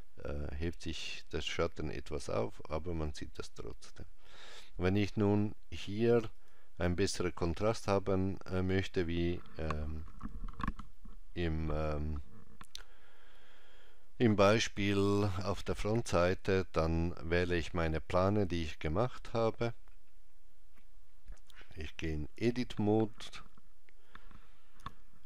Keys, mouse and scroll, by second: 6.2 click, 7.5 click, 22.3 Tab, 24.7 n.